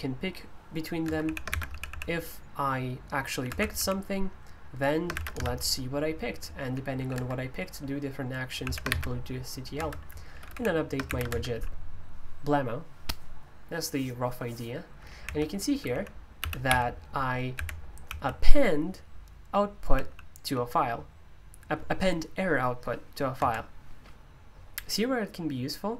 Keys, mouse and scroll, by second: 1.0 Escape, 1.2-1.9 typing, 3.2-4.0 typing, 5.1 typing, 6.5-6.9 typing, 7.1 Escape, 8.3-9.1 typing, 9.8 Escape, 10.1-11.1 typing, 11.3 Escape, 15.2 k, 16.6-18.2 typing, 19.9-20.4 typing, 23.4 Escape.